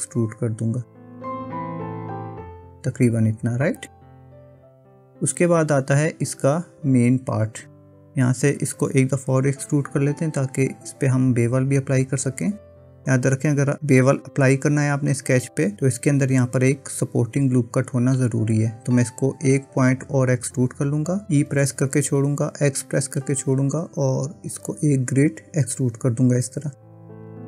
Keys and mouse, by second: 4.3-7.7 middle drag, 10.1 KP_1, 21.9 e.